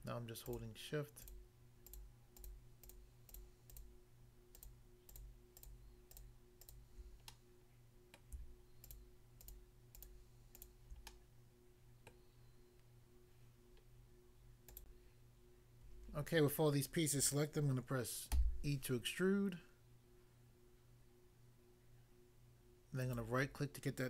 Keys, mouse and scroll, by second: 0.4 shift+click, 1.2 shift+click, 1.8 shift+click, 2.4 shift+click, 2.9 shift+click, 3.3 shift+click, 3.7 shift+click, 3.8 shift+double click, 4.5 shift+click, 4.6 shift+click, 5.1 shift+click, 5.2 shift+double click, 5.6 shift+click, 5.7 shift+click, 6.1 shift+click, 6.6 shift+click, 7.3 middle click, 8.1 middle click, 8.8 shift+click, 9.4 shift+click, 9.6 shift+click, 10.0 shift+click, 10.1 shift+click, 10.6 shift+click, 10.7 shift+click, 11.1 middle click, 12.2 middle click, 14.6 click, 14.8 click, 14.9 click, 18.3 e, 23.0 right click.